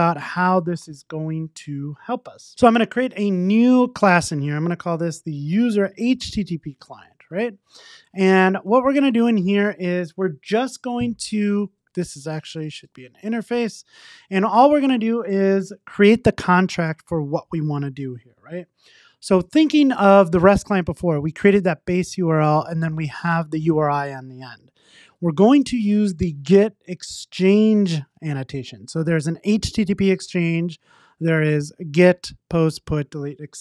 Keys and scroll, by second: 12.4 alt+shift+Right, 13.8 Return.